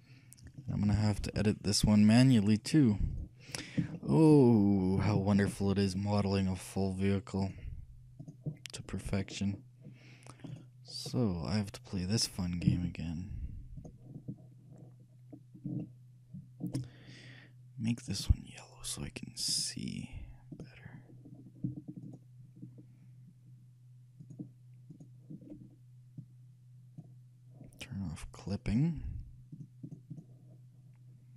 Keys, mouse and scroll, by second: 0.7-2.5 drag, 2.8-4.1 drag, 4.1 shift+middle click, 4.8 shift+click, 4.9-7.2 shift+middle drag, 7.0 scroll up 1, 7.5-9.2 shift+drag, 9.3-11.3 middle drag, 10.6-12.4 right drag, 11.3-12.4 drag, 12.4 middle click, 12.8 z, 15.9-18.1 middle drag, 18.2-21.4 shift+drag, 21.4-23.7 middle drag, 22.1-27.0 right drag, 26.3-28.1 drag, 28.8-31.3 drag.